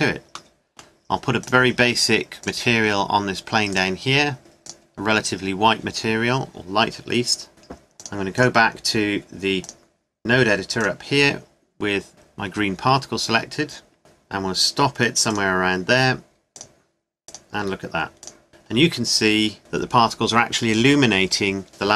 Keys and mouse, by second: 1.7 middle click, 6.5-8.1 middle drag, 11.5 middle click, 14.0 ctrl+s, 19.5-20.8 middle drag.